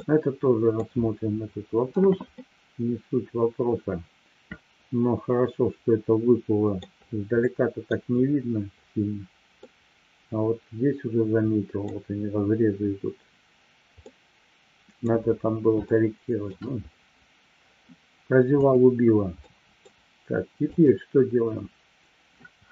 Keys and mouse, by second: 0.0-0.6 middle drag, 2.4-6.8 middle drag, 7.5-7.9 middle drag, 9.6-11.9 middle drag, 14.0-15.0 middle drag, 15.9-16.5 shift+middle drag, 18.6 click, 19.4-19.9 middle drag, 20.6 click.